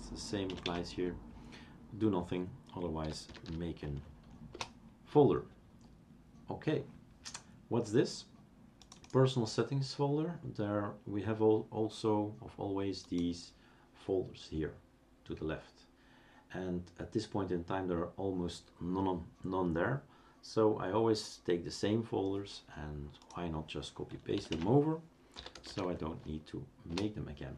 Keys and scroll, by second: 0.6 typing, 2.8-3.9 typing, 4.5 Return, 24.5-26.1 typing, 26.9 Return.